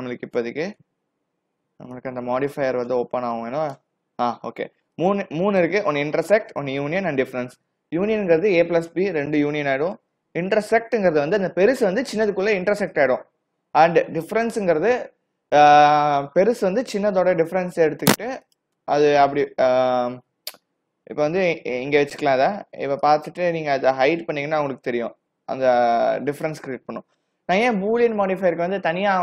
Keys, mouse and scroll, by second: 0.0 ctrl+z, 0.5 ctrl+z, 0.9 ctrl+z, 1.3 ctrl+z, 2.0 ctrl+z, 2.6 ctrl+z, 3.0 ctrl+z, 3.4 ctrl+z, 3.8 ctrl+z, 5.0 click, 5.5 click, 18.5 click, 19.6 g, 24.4 h, 25.6 click.